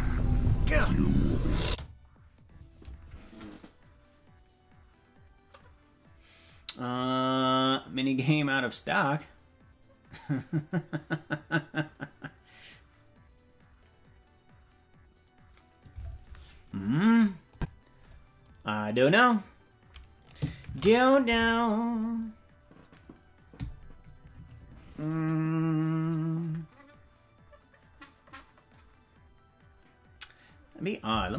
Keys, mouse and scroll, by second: 1.6 space, 17.5 click, 23.0 ctrl+s.